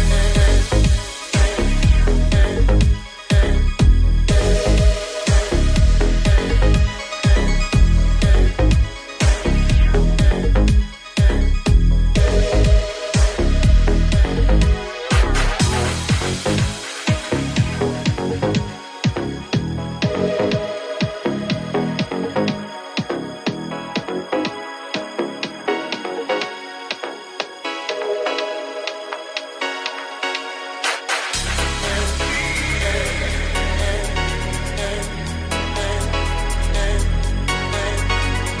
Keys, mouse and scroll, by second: 0.9 ctrl+KP_Add, 2.0 g, 2.0 ctrl+KP_Add, 5.4 Tab, 12.7 /, 13.2 right click, 13.2-14.9 middle drag, 13.9 ctrl+s, 14.9 right click, 14.9-36.6 middle drag, 15.0 Tab, 15.6 /, 17.1 right click, 18.4 right click, 18.4 2, 22.6 shift+click, 23.6 f, 23.7 ctrl+z, 27.9 alt+z, 28.8 alt+z, 36.6 alt+right click, 36.8-38.6 alt+middle drag, 37.6 alt+z.